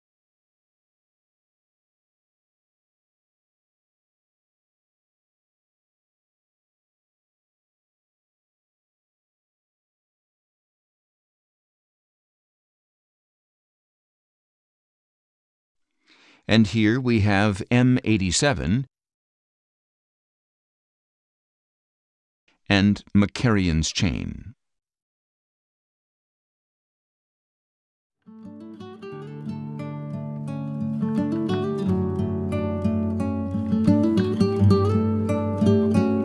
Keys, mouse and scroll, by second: 0.9-2.3 drag, 2.8-3.9 drag, 5.0-6.3 drag, 7.3-8.6 drag, 9.4-10.6 drag, 11.8 click, 14.4 click, 15.4 scroll down 1, 16.2-16.8 scroll down 4, 18.3-19.8 middle drag, 20.3-21.9 middle drag, 22.3-24.6 middle drag, 24.6 click, 25.5 middle click, 26.3 middle click, 27.7 middle click, 29.5 middle click, 30.9 middle click, 31.6 middle click, 32.3-33.3 middle drag, 33.8 middle click, 34.5 middle click, 35.1 middle click, 35.4 middle click, 35.6 middle click, 35.8-36.2 middle drag.